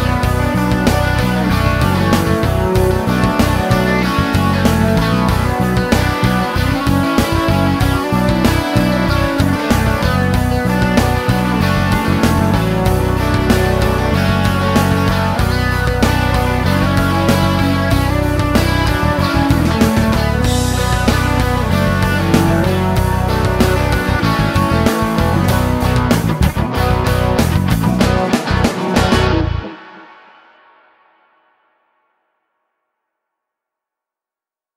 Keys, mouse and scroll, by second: 0.3 shift+o, 2.4 click, 3.7 click, 4.3 shift+o, 5.4-6.0 middle drag, 6.0 scroll up 1, 6.7 scroll down 2, 8.9 middle click, 11.1 click, 12.9 click, 14.9 click, 16.2 s, 18.2 click, 21.0 click, 22.7 click, 23.3 s, 25.1 middle click, 30.2 middle click, 30.7 scroll up 1, 31.8 click, 32.4 click, 33.8 click.